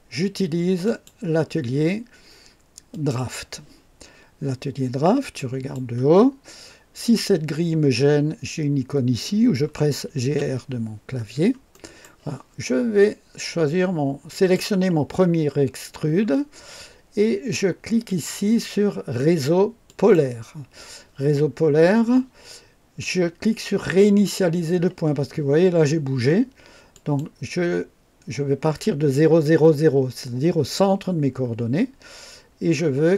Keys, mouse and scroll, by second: 0.8 click, 2.8 click, 5.3 click, 6.2 scroll down 1, 9.7-10.9 typing, 11.1 scroll up 1, 11.6 right click, 14.2 click, 18.0 click, 19.8 click, 26.8 click.